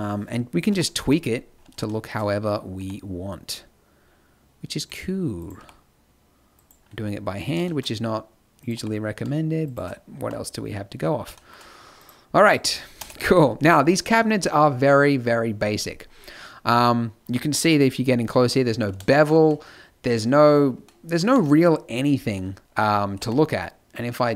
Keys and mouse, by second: 0.6 KP_1, 0.9 z, 2.7 g, 5.3-6.5 drag, 5.5 g, 8.7 g, 10.1 a, 12.9 KP_0, 13.0 z, 17.5 KP_Decimal.